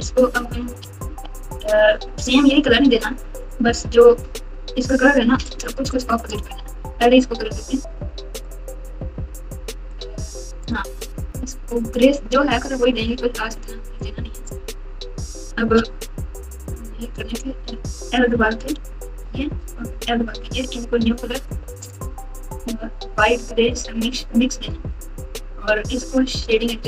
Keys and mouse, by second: 0.6-1.4 typing, 8.3 click, 9.9 click, 11.6 click, 16.1 Tab, 18.6 l, 19.9 l, 23.2 click.